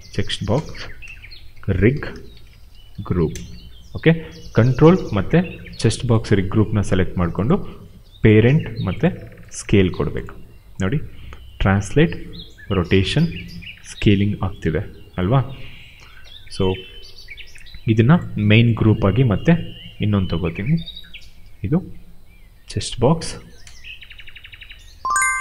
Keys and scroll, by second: 0.5-3.5 typing, 11.0 w, 11.6 ctrl+z, 12.1 e, 12.9 ctrl+z, 13.3 r, 14.6 ctrl+z, 19.8 ctrl+g, 21.3 ctrl+v, 23.6 BackSpace, 24.9-25.4 typing.